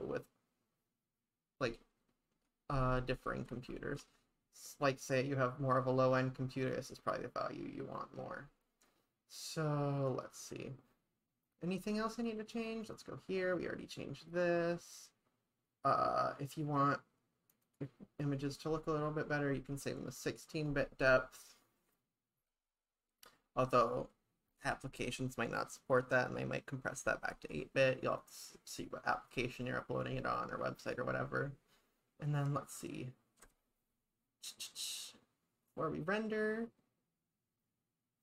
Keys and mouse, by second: 11.5 click, 12.5 click, 12.8 click, 17.6 click.